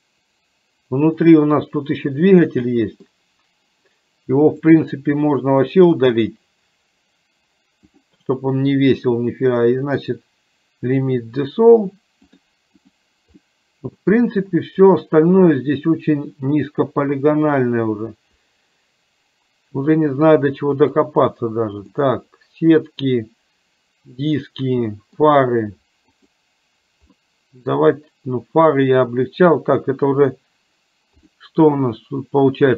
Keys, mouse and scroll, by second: 1.1 click, 2.8 middle click, 4.8-5.9 drag, 8.1-11.1 drag, 12.5 click, 13.5 middle click, 15.1-19.9 middle drag, 22.1-25.3 middle drag, 26.2 click, 27.3 middle click, 31.2 click.